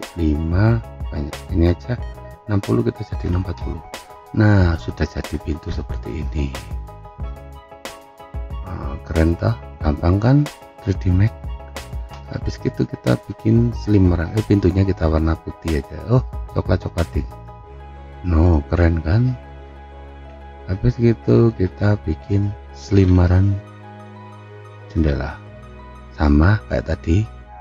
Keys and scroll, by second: 2.9-3.7 typing.